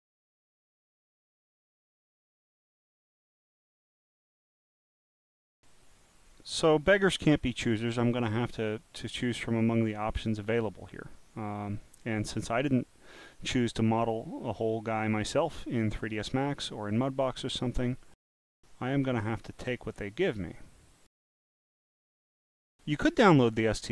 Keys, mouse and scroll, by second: 2.3 scroll down 1, 3.6-4.0 scroll down 1, 4.5 scroll down 1, 6.2 scroll down 2, 7.8 scroll up 1, 9.5-10.4 scroll down 1, 11.1 scroll down 1, 11.8-13.5 middle drag, 14.1 middle click, 15.2-17.4 middle drag, 22.1 click.